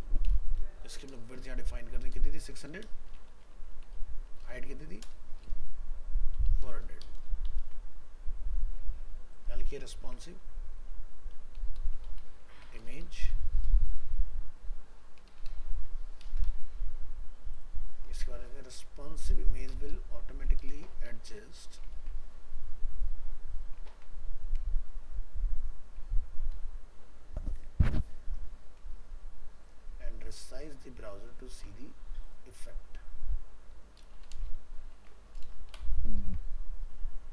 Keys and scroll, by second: 7.6 ctrl+s, 21.9 ctrl+c, 23.9 ctrl+w, 26.5 ctrl+v, 31.5 ctrl+c, 34.4 ctrl+v.